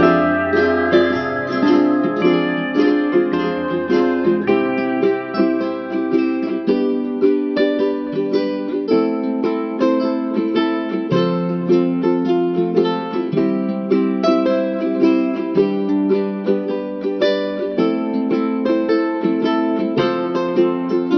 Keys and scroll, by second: 6.8 ctrl+-, 9.9 ctrl+=, 11.1 space.